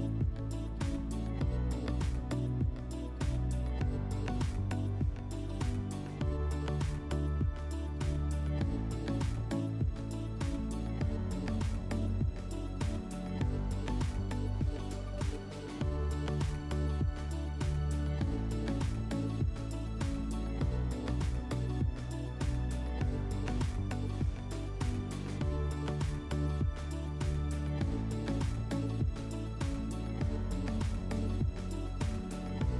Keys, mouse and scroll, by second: 1.1 click, 4.9 click, 6.5 click, 7.5 alt+w, 14.0 click, 14.7 alt+w, 15.8 middle click, 22.1 shift+click, 23.3 click, 25.4 click, 25.6 click, 26.4 typing, 27.0 Return, 28.6 typing, 29.8 click, 31.2 click, 32.0 Delete.